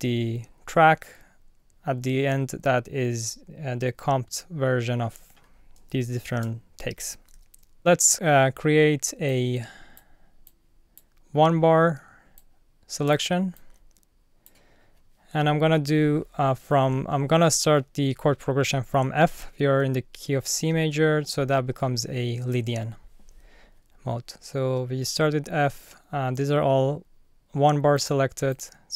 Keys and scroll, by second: 6.3 alt+super+t.